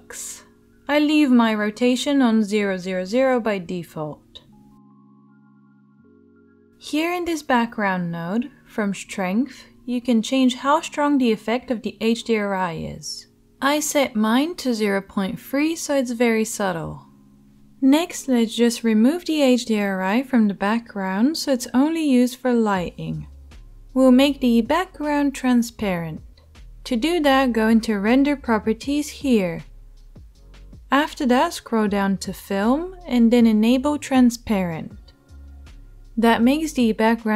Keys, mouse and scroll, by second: 27.5-32.8 drag, 35.1-37.3 drag.